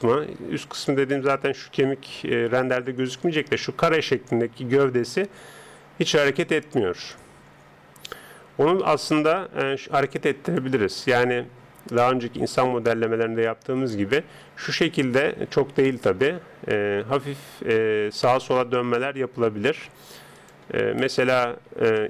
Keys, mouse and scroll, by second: 8.9 KP_1, 10.5 click, 13.6-16.2 middle drag, 14.1 r, 16.2 r, 20.3 click, 20.9-22.0 middle drag.